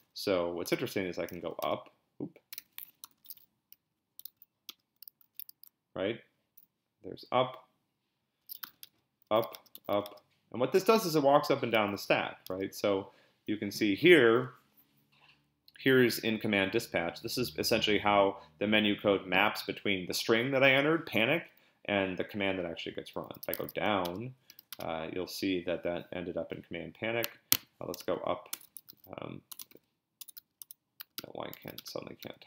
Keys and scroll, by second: 0.0-4.2 typing, 4.7 Return, 8.1-10.4 typing, 12.1 l, 12.5 Return, 23.2-24.5 typing, 24.7 Return, 27.7-32.4 typing, 31.2 Return.